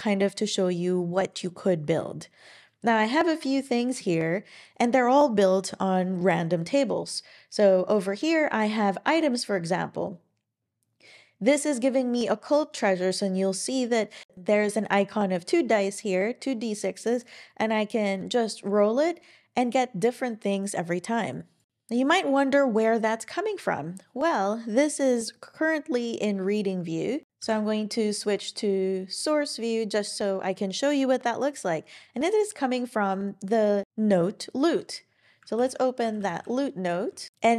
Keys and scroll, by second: 27.4 super+e, 35.6 super+o, 35.7-36.8 typing.